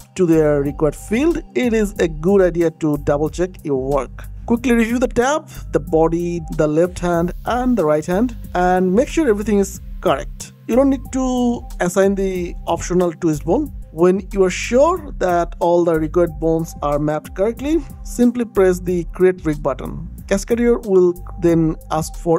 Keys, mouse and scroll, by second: 2.0 click, 9.5 click, 15.1 click.